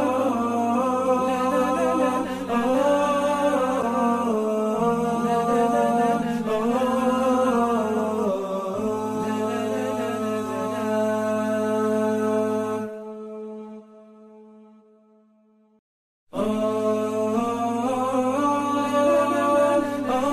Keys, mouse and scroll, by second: 0.8 alt+scroll down 1, 1.4 alt+scroll, 1.4 ctrl+alt+2, 2.2 double click, 3.7 ctrl+shift+[, 4.3 alt+scroll up 1, 5.2-5.6 alt+scroll up 1, 5.8 alt+scroll down 1, 7.7 space, 8.7 space, 9.0 shift+click, 9.3 shift+click, 9.6 ctrl+c, 10.3 alt+scroll up 1, 10.7-11.9 typing, 11.4 alt+scroll down 1, 12.0 alt+scroll up 1, 13.4 alt+scroll up 1, 16.1 alt+scroll down 1, 16.6 double click, 17.4 ctrl+2, 17.8 alt+scroll up 1, 18.6 double click.